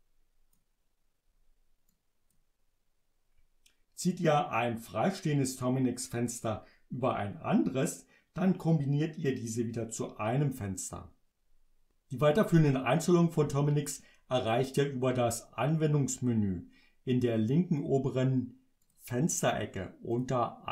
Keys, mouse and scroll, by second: 1.9 click, 18.9 click, 20.2 click.